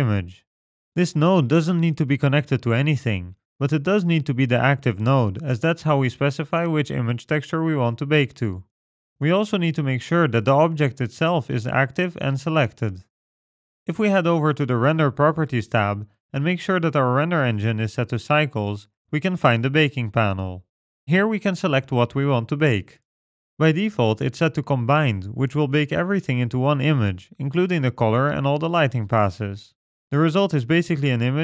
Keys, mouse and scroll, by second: 0.2 middle click, 0.6 scroll up 2, 1.5 click, 11.3 click, 15.7 click, 18.6-19.4 scroll down 4, 19.4-20.7 scroll down 1, 20.7 click, 21.7 scroll down 2.